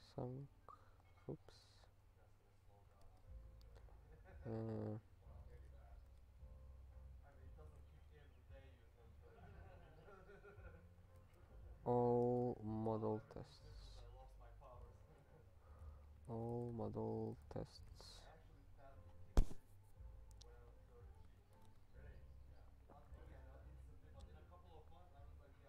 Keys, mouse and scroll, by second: 1.7 alt+,, 3.0 ctrl+space, 6.2 alt+p, 7.8 ctrl+k, 10.8-12.4 typing, 13.8 ctrl+n, 13.9 ctrl+n, 14.8 ctrl+g, 15.4-18.0 typing, 21.0 ctrl+a, 21.2 Return, 21.4 ctrl+p, 21.6 Tab.